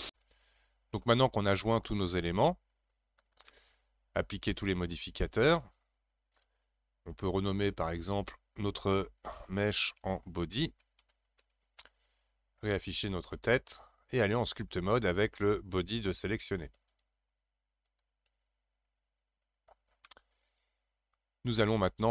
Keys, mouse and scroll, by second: 3.5-6.5 middle drag, 7.5 click, 7.7-10.8 drag, 13.3 click, 16.9-19.9 drag, 20.1-22.1 middle drag.